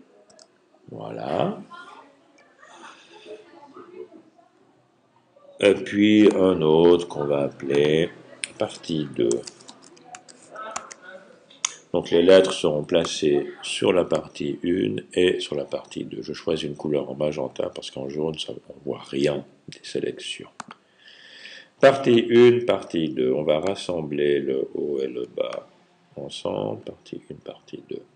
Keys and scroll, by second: 8.6-11.1 typing.